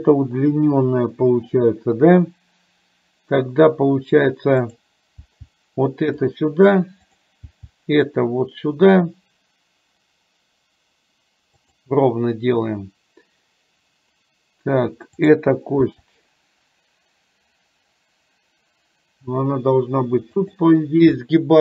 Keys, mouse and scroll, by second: 4.6 click, 5.3 g, 7.3 click, 7.5 g, 15.4 click, 15.9 g.